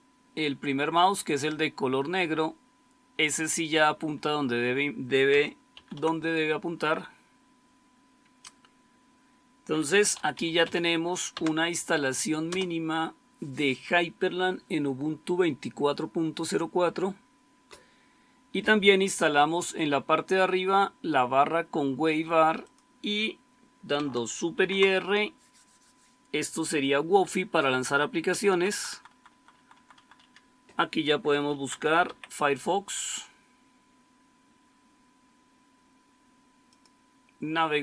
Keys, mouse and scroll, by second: 5.6 super+q, 9.7-11.0 typing, 11.2 Tab, 12.3 Return, 24.4 super+r, 28.3 Down, 28.5 Down, 28.6 Down, 28.8 Down, 29.0 Down, 29.3 Down, 29.4 Down, 29.7 Down, 29.9 Down, 30.1 Down, 31.4-32.5 typing.